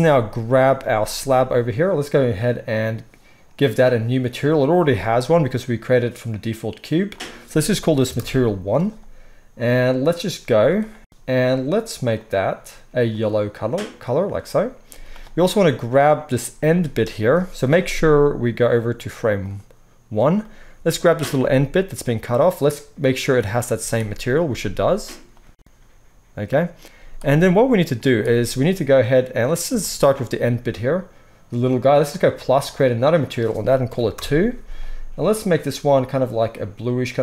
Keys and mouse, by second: 0.6 click, 0.8-7.1 middle drag, 0.8 z, 7.1-12.3 drag, 10.5 z, 12.3-18.7 middle drag, 14.9 z, 18.7-21.2 drag, 21.2-32.2 middle drag, 23.7 z, 24.5 z, 26.9 z, 32.2-35.4 drag, 35.4-37.2 middle drag.